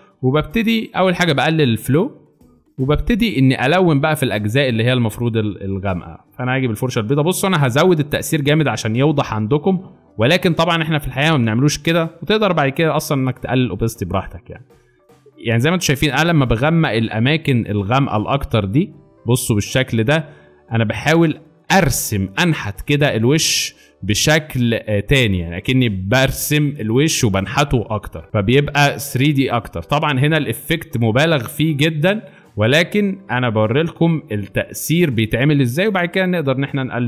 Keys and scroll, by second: 1.9-4.0 typing, 6.0 x, 30.2 x, 30.8 z.